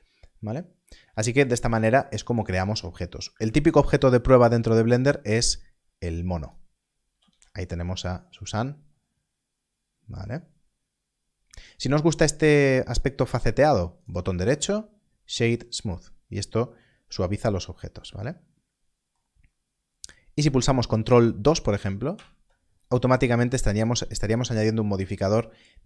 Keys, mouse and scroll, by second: 0.0 Tab, 1.5 Tab, 2.0 x, 3.3 shift+a, 6.3 shift+a, 6.4 click, 7.3 x, 7.9 click, 15.8 click, 20.4 click, 22.1 ctrl+2, 25.1 ctrl+2.